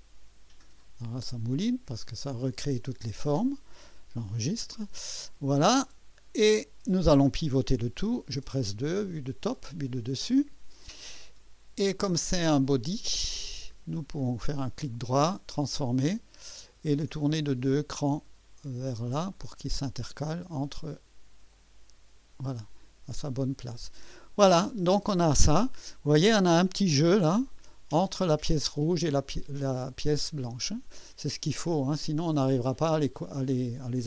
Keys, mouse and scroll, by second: 3.0 click, 4.2 ctrl+s, 5.1-7.4 drag, 8.2 2, 9.7-10.1 scroll up 1, 10.3 right click, 11.1 right click, 12.8 click, 14.0 right click, 15.5 click, 17.2-19.6 drag, 21.5 click, 22.6 click, 23.1 click, 23.8 middle click, 24.5 scroll up 1, 25.0 right click, 25.7 scroll up 1, 26.8 scroll up 1, 27.5-28.1 right drag, 28.3-29.1 scroll up 2, 30.7-31.9 scroll down 3, 33.2-33.9 scroll down 2.